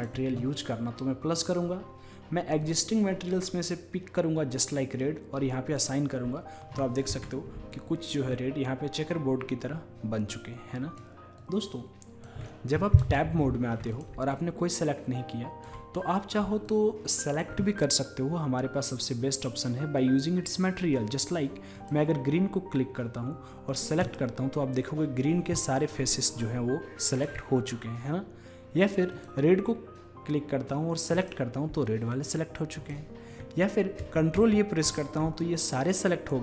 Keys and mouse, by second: 1.5-4.4 drag, 5.8 click, 6.4-7.9 middle drag, 7.2 Tab, 7.9 drag, 8.0 middle drag, 8.2-10.1 drag, 11.4-13.9 drag, 13.9-15.2 middle drag, 15.2 click, 16.7-18.6 drag, 21.8-23.7 drag, 24.1-27.5 drag, 27.6-29.2 middle drag, 29.2-31.1 drag, 31.2-33.7 drag, 34.1 ctrl+a, 34.4 ctrl+a, 35.5-36.4 drag.